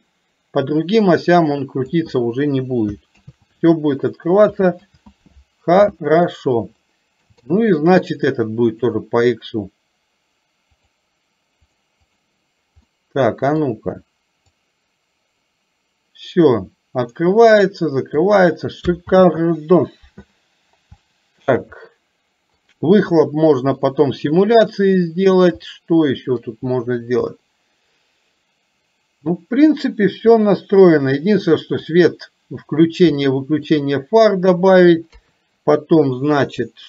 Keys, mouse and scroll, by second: 4.8 ctrl+z, 7.0 middle click, 7.5 shift+middle click, 9.0 click, 10.8 click, 11.7 click, 12.1 click, 13.1 middle click, 14.6-18.3 drag, 21.1-21.6 middle drag, 22.0-22.6 middle drag, 24.0-25.3 middle drag, 25.7-26.5 shift+middle drag, 27.5-31.8 middle drag, 33.2-33.6 shift+middle drag, 35.2 KP_3.